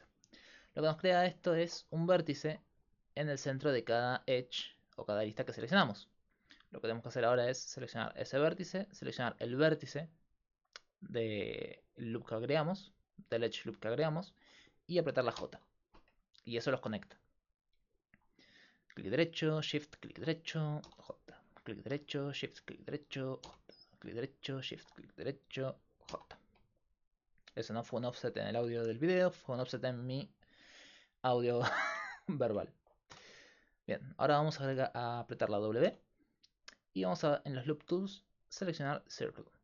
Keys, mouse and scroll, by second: 0.6 middle click, 1.1 middle click, 1.6 ctrl+Tab, 2.9-10.5 right drag, 10.5-15.4 middle drag, 15.4 j, 17.4-23.5 right drag, 20.9 j, 23.5 j, 26.1 j, 26.5 middle click, 27.1-28.2 middle drag, 29.1-31.8 right drag, 31.8 middle click, 33.1 q, 35.9 w.